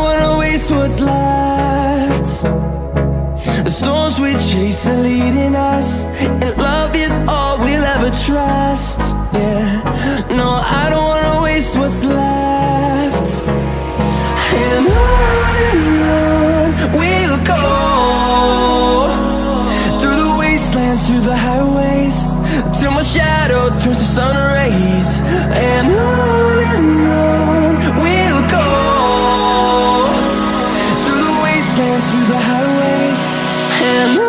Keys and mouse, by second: 2.5 click, 3.0 g, 4.6 click, 4.8 g, 6.1 g, 7.3 g, 8.3 click, 8.5 g, 9.4 click, 9.8 g, 12.2 g, 17.5 Tab, 18.6-19.6 drag, 19.6 Delete, 20.4 shift+a, 22.4 g, 23.4 click, 23.8 r, 25.2 middle click, 25.7 click, 26.7-27.8 drag, 27.8 middle click, 31.6 click, 31.9 ctrl+z, 32.9 s.